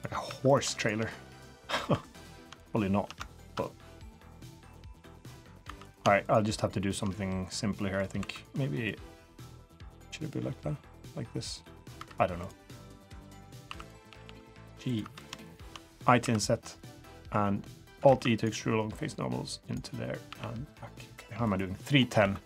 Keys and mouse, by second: 0.2 2, 1.2 click, 1.9 2, 3.3 ctrl+click, 3.6 middle click, 4.4-5.5 drag, 5.6 3, 5.8 click, 6.2 shift+click, 7.7 middle click, 8.2 2, 8.8-11.9 drag, 12.4 click, 12.4 3, 13.6 1, 14.1 g, 15.0 3, 15.4 shift+click, 16.2 i, 17.1 middle click, 18.0 alt+e, 20.3 g, 22.2 3, 22.3 click.